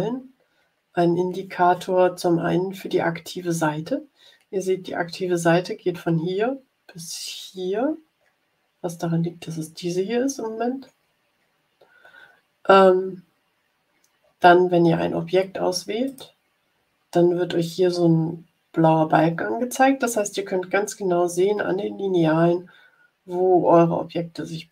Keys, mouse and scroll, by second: 7.8-8.3 scroll down 2, 10.9-11.6 scroll up 4, 14.1-14.5 scroll down 2, 15.1 scroll down 2, 16.0 click.